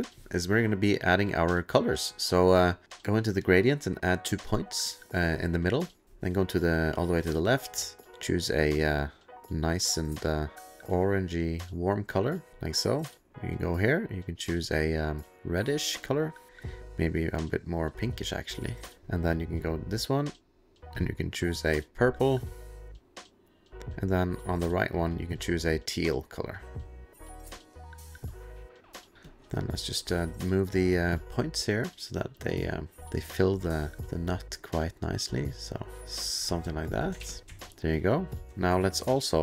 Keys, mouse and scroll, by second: 2.1 click, 3.2 click, 3.8 click, 5.0 click, 7.2 click, 8.7 click, 9.8 click, 10.3 click, 10.6 click, 11.5 click, 12.5 click, 13.3 click, 14.0 click, 15.3 click, 16.1 click, 16.5 click, 19.9 click, 20.5 click, 21.5 click, 23.3 click, 24.1 click, 25.5 click, 27.1 click, 28.0 click, 29.1 click, 29.2 middle click, 31.2 click, 34.0 click, 37.0 click, 37.2 ctrl+f, 37.2 ctrl+click, 37.5 ctrl+s, 38.3 click, 38.4 click, 38.4 alt+scroll, 39.3 click.